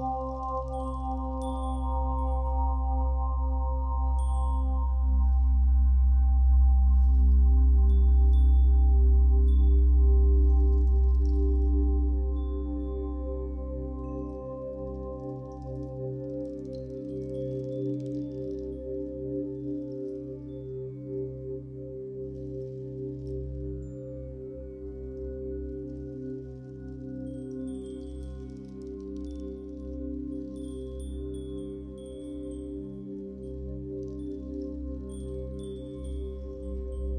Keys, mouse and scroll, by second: 3.1 middle click, 7.3 middle click, 9.0 l, 10.0-10.3 scroll down 1, 10.8 middle click, 15.2-17.3 middle drag, 15.2 shift+a, 16.6-17.3 scroll up 2, 17.3 click, 21.7-27.1 drag, 33.0 x, 33.2-34.1 scroll down 2, 34.1 click, 35.4 click, 35.8-36.4 scroll up 2, 36.0-37.1 shift+middle drag, 36.8 scroll up 1.